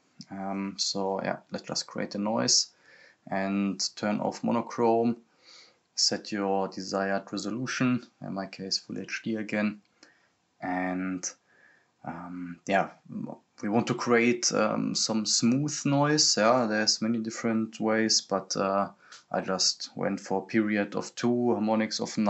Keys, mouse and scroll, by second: 0.0-0.4 typing, 1.5 click, 9.1 click, 11.9 scroll up 1, 12.4 scroll down 1, 13.3 click, 18.1-22.2 drag.